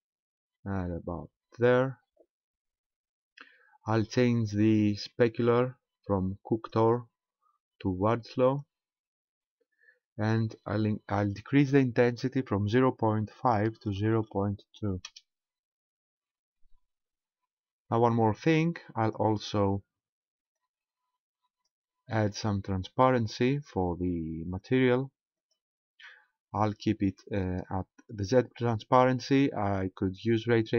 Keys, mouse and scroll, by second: 6.5 click, 11.5 click, 18.0 click, 20.6 click, 25.4 click.